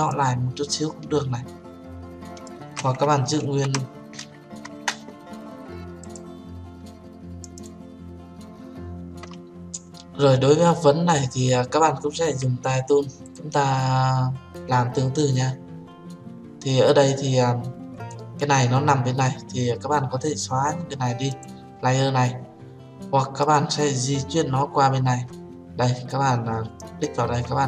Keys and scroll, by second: 3.9 ctrl+z, 5.5 Return.